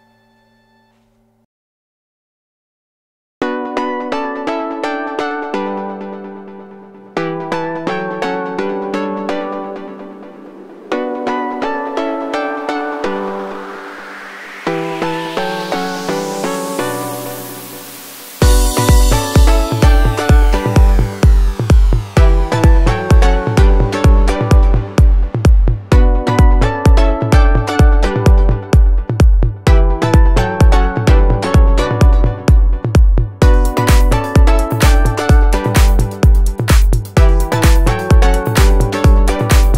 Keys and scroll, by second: 1.0 r, 1.1 space, 2.0 3, 2.3 Return, 14.9 space, 31.7 space, 32.4 Escape.